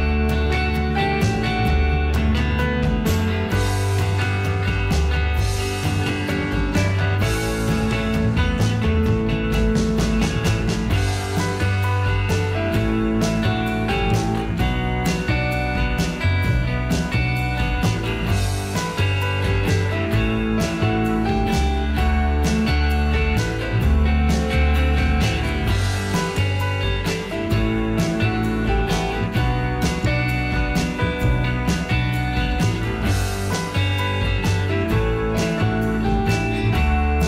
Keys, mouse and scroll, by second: 4.1 F2, 24.0 F2.